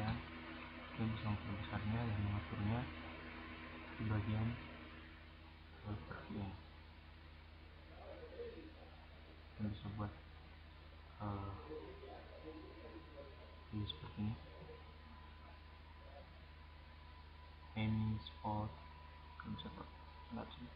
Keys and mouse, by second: 2.0-3.8 drag, 4.2-6.1 drag, 4.4 right click, 5.4-6.1 right drag, 6.1-7.5 middle drag, 7.6-9.6 drag, 8.0 right click, 9.6-10.9 middle drag, 11.2-12.6 middle drag, 13.0 drag, 13.9-15.0 drag, 15.5-17.2 middle drag, 17.2 click, 17.5-18.2 drag, 18.7 click.